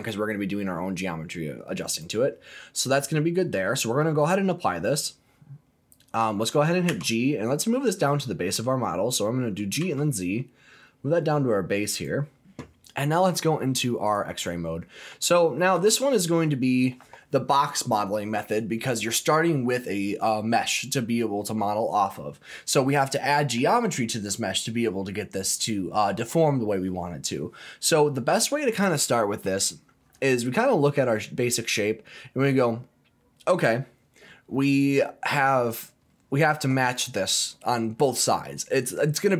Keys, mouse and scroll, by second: 1.8 click, 6.9 g, 9.8 z, 11.9 click, 14.1 click, 14.8 scroll up 2, 15.2 shift+middle click, 15.9-16.8 scroll down 2, 31.8 scroll down 1.